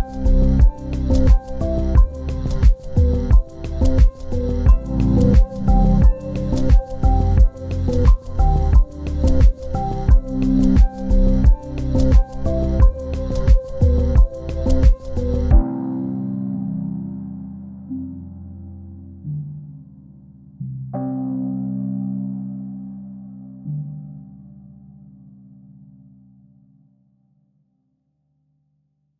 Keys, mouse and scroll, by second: 1.8 double click, 3.4 ctrl+g, 4.5 ctrl+s, 8.8 ctrl+space, 9.1 ctrl+click, 10.5-11.0 scroll down 1, 11.9 ctrl+space, 12.9 ctrl+space, 13.2 ctrl+click, 15.9 ctrl+c, 18.3 scroll down 1, 20.1 z, 22.4 ctrl+space, 22.6 ctrl+right click.